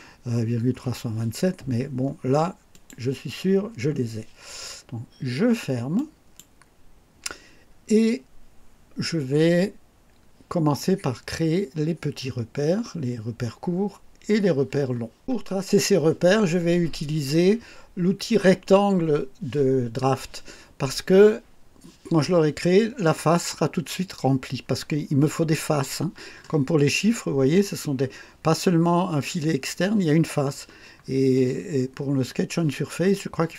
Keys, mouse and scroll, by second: 2.7 click, 5.9 click, 26.4 scroll up 2, 27.0 scroll up 2, 30.9-31.2 scroll down 2.